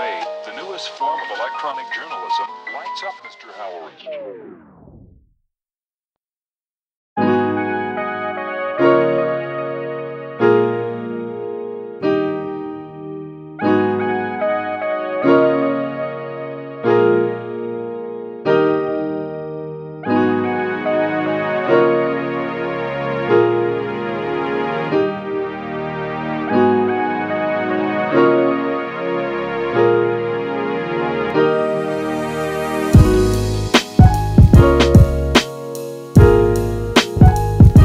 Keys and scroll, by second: 8.3 space, 18.1 super+z, 21.4 space, 25.0 space, 29.1 super+z, 29.4 space, 30.9 super+z, 31.9 super+z, 32.6 space.